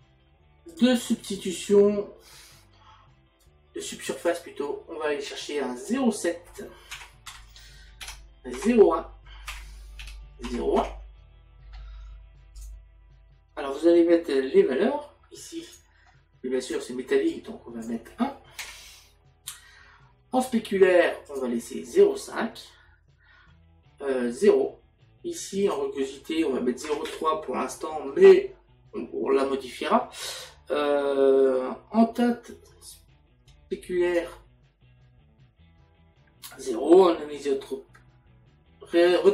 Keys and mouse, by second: 5.8 click, 8.0 Tab, 8.6 KP_Decimal, 10.0 Tab, 10.5 KP_Decimal, 12.5 click, 15.7 click, 17.3 click, 18.6 KP_1, 21.2 click, 25.6 click, 26.8 KP_Decimal, 34.1 click, 39.2 click.